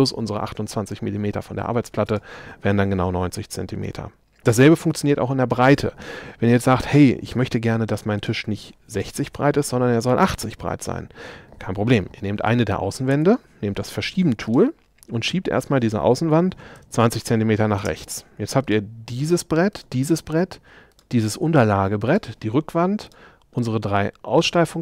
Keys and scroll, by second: 13.1 m, 16.6 2.